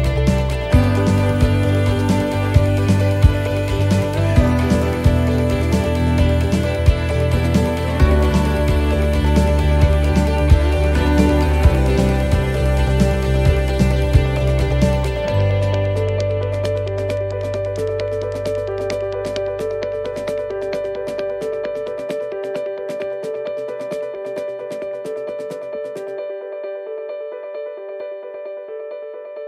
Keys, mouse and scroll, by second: 0.3 s, 7.4 middle click, 8.2-8.9 scroll down 1, 8.9 middle click, 8.9 scroll down 1, 14.1 middle click, 14.6-15.1 scroll up 2, 15.5 middle click, 15.5 scroll up 2, 16.7 right click, 18.6 click, 26.3 right click, 27.1 shift+right click, 28.1 click.